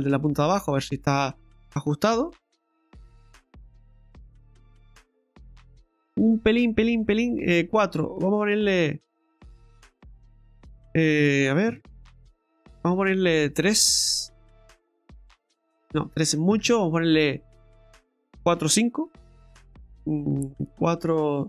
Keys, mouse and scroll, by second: 0.6-1.3 scroll down 1, 1.3 scroll down 2, 1.6 shift+middle click, 2.0-2.3 scroll up 2, 2.3 middle click, 2.9-3.4 scroll up 2, 3.4 middle click, 4.7-5.1 scroll up 1, 5.5-6.2 scroll up 1, 8.4 click, 16.6 ctrl+z, 17.5 click.